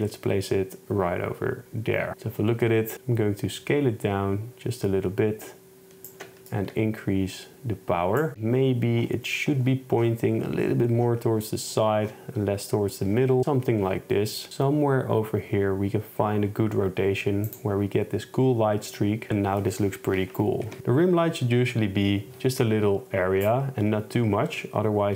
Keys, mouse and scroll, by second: 2.1 KP_0, 6.6 shift+click, 20.7 Left, 23.5 click.